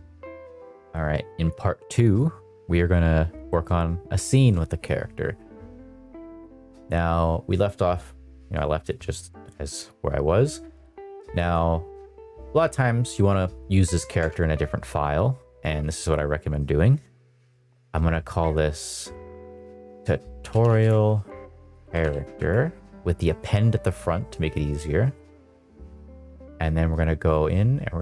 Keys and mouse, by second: 3.4 shift+middle drag, 4.2 shift+middle click, 6.4 click, 11.2 click, 11.4-22.3 drag, 25.6 click, 26.8 click.